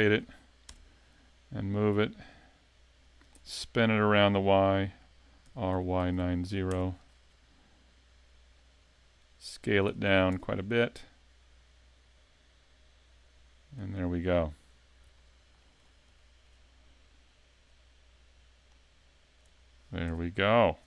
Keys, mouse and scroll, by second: 0.1 shift+d, 2.0 click, 3.3 click, 3.6 shift+d, 5.5 r, 8.1 click, 10.3 s, 14.7 scroll down 2, 15.2 middle click, 15.8 scroll up 5, 16.2 shift+middle click, 17.7 click, 19.7 scroll down 2, 20.1 a, 20.3 middle click.